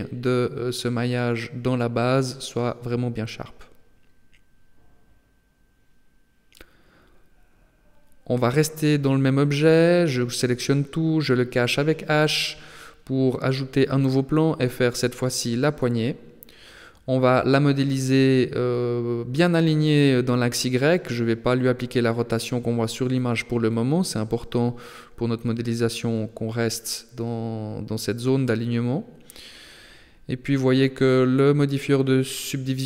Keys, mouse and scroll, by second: 0.3 ctrl+r, 3.5 middle click, 4.1 Tab, 4.5 scroll down 3, 4.9 middle click, 7.5 KP_7, 8.3 shift+middle click, 9.1 Tab, 9.9 a, 10.3 a, 11.1 h, 12.3 shift+middle click, 12.9-13.5 scroll down 2, 13.5 shift+a, 15.2-15.6 scroll down 4, 15.9 s, 17.8-18.9 scroll up 3, 18.9 scroll up 1, 20.6 g, 24.5 right click, 24.9 shift+right click, 25.5 g, 28.3 shift+middle click, 29.3 g, 30.7 s.